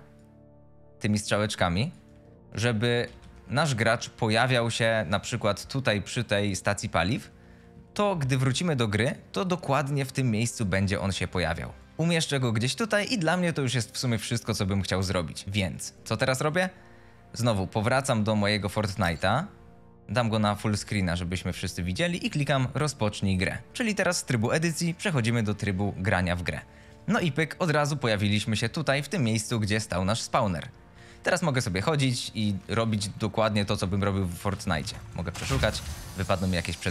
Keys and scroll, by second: 2.0 w, 2.6 a, 3.1 s, 6.7 w, 7.1 s, 7.7 w, 8.1 a, 11.8 q, 14.3 s, 18.9 Escape, 27.0 a, 27.4 s, 30.8 w, 31.2 a, 34.2 w, 34.7 e, 35.7-36.9 typing.